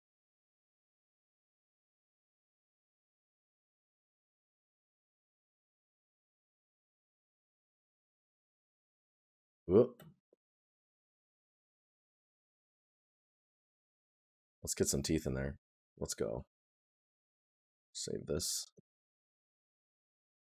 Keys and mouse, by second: 6.1 right click, 10.8 right click, 13.5 right click, 20.0 right click.